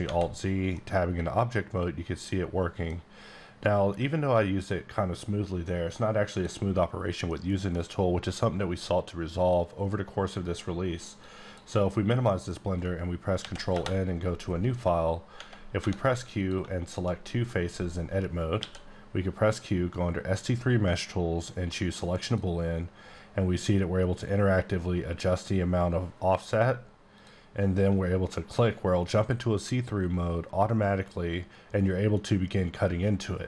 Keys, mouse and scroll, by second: 0.0 Tab, 0.7 middle click, 11.2 click, 12.3 middle click, 13.4 ctrl+n, 13.7 Return, 14.7-15.4 scroll up 5, 15.4 Tab, 15.8 3, 16.4 click, 16.8 click, 17.2 middle click, 18.6 q, 22.0 click, 27.2 click.